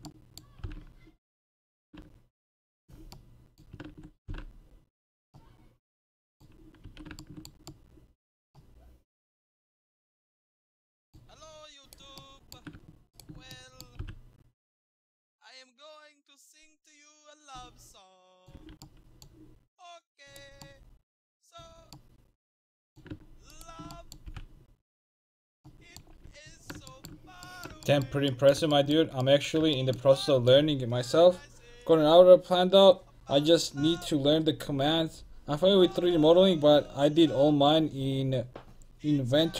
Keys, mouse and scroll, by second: 0.7 g, 4.3 g, 5.1 click, 6.9 a, 11.9-15.1 right drag, 14.0 g, 17.4 click, 18.6 a, 20.3-22.6 drag, 23.6-25.4 right drag, 24.3 g, 25.9 middle click, 26.3 a.